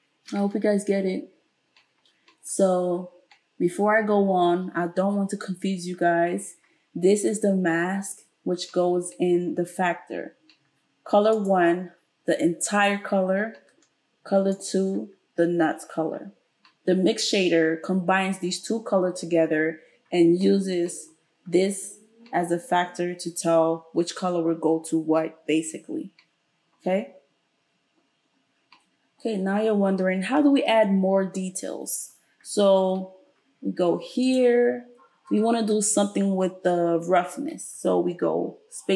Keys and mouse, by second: 11.5-14.5 middle drag, 14.5 click, 14.7-34.3 middle drag, 34.3 click.